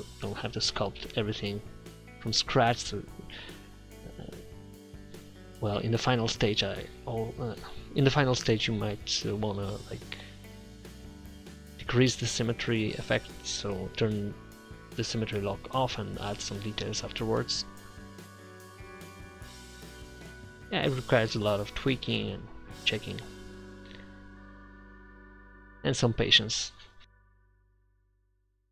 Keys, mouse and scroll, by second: 1.1-2.7 middle drag, 2.1 click, 2.1 right click, 2.8 click, 4.0 middle click, 4.2-9.5 drag, 9.5 middle click, 9.9 middle click, 10.8 4, 11.2 middle click, 12.0-15.0 drag, 14.8 f, 15.1-17.2 drag, 17.4 click, 17.8 middle click, 18.6-19.0 ctrl+z, 19.2 ctrl+z, 19.8 middle click, 20.1 middle click, 20.5 click, 21.4 middle click, 21.8 7, 22.1 click, 23.6-24.7 middle drag, 24.9 middle click, 25.2 middle click, 27.1 click, 28.3 click, 28.6 click.